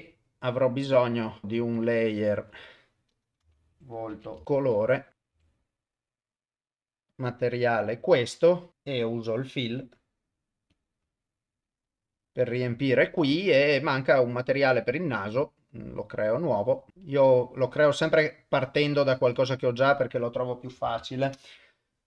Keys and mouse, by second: 1.0 click, 1.8 click, 2.5-4.4 drag, 9.6 click, 10.7-11.8 drag, 15.3 click, 16.3 click, 16.9-18.1 drag, 19.4 click, 19.7-21.3 drag.